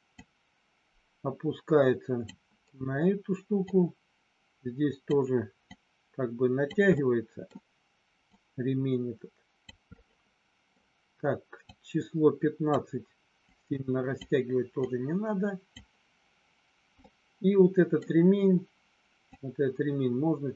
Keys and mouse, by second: 0.1-2.2 drag, 3.6-5.1 drag, 5.7-6.7 drag, 6.9 middle click, 8.2-9.7 drag, 10.0 middle click, 11.6-12.7 drag, 13.5 click, 14.9 click, 17.0 middle click, 19.3-20.5 drag.